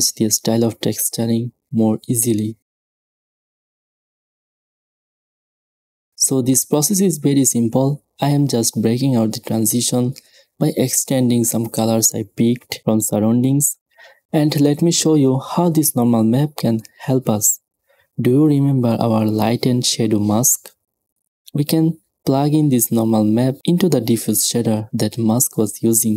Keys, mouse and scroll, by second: 10.4-12.5 typing, 16.6 shift+a.